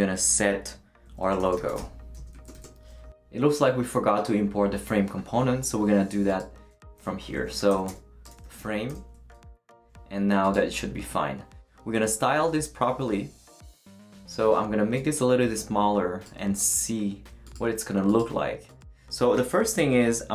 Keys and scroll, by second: 1.2-2.5 typing, 8.1-9.1 typing.